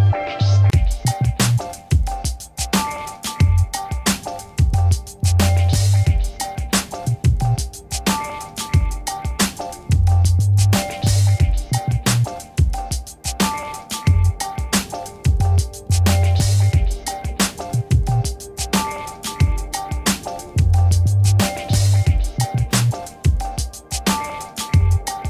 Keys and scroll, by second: 0.4 Return, 2.7 ctrl+shift+d, 3.5 v, 5.0 ctrl+d, 11.5 v, 13.7 t, 17.0 2, 17.5 Return, 18.2 v, 20.1 ctrl++, 21.7 m.